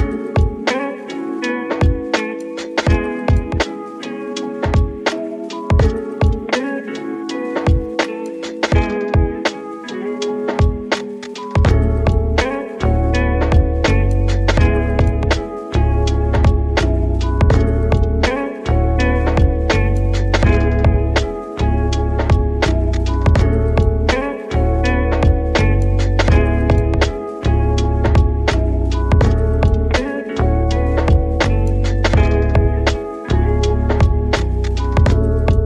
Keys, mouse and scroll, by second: 2.2 drag, 2.7 s, 3.6 r, 4.5 s, 7.2 click, 8.5 r, 9.2 s, 10.6 s, 12.0 click, 12.5 g, 14.3 click, 14.8 g, 16.5 click, 17.4 s, 18.9 click, 19.9 r, 20.9 s, 22.6-23.0 scroll down 2, 23.0-24.2 middle drag, 24.2 Tab, 25.6 click, 26.2 scroll down 2, 27.6 scroll down 5, 29.7-32.9 drag, 32.9 scroll down 1, 33.1-35.5 middle drag, 35.5 s.